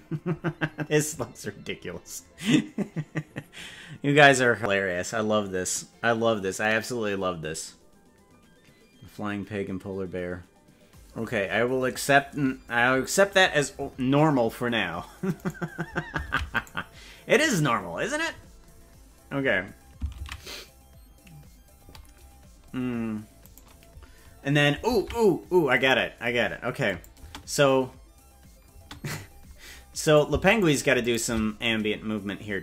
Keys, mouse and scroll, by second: 15.6 right click, 16.4 ctrl+Tab, 16.8 right click, 17.6 right click, 18.9 scroll up 1, 21.7 ctrl+s, 23.5 right click, 24.9 ctrl+Tab, 25.9 right click, 26.9 click, 27.3 space, 28.7 space, 30.1 right click, 30.7 shift+right click, 31.1 right click, 31.6-32.6 drag.